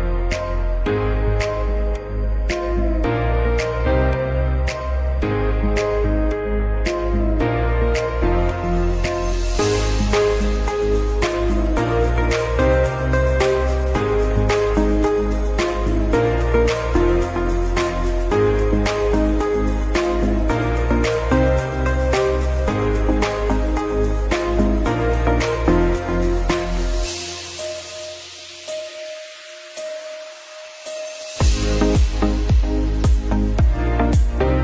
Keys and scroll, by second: 1.2 space, 11.2 shift+Page_Up, 19.0 ctrl+q, 25.8 space, 32.7 shift+Page_Down, 34.4 shift+Page_Down.